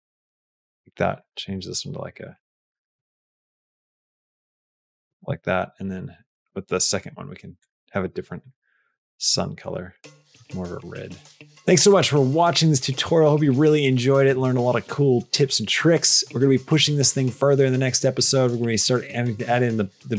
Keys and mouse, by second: 7.4 click, 8.2 click.